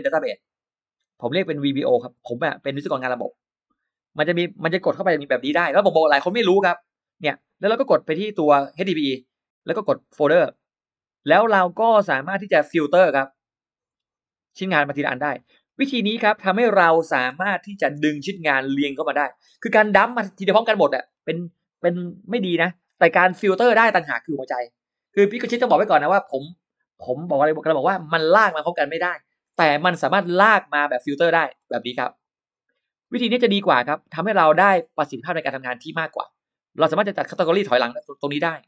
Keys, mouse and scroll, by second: 1.7 click, 3.0 click, 5.2 click, 8.7 click, 10.3 click, 13.7 scroll down 1, 14.5 click, 15.0-15.6 scroll up 2, 16.1 scroll up 1, 16.6-17.9 scroll down 4, 17.9 space, 18.1 click, 18.6 click, 19.4 middle click, 20.0 Delete, 20.2-21.5 scroll up 7, 22.5 scroll up 2, 23.2 scroll up 2, 30.7 scroll down 2, 31.3 scroll down 2, 32.0 click, 32.6-33.2 scroll up 1, 33.4 click, 33.6-34.0 scroll down 1, 34.4 click, 35.3 click, 35.7 middle click, 37.9 click.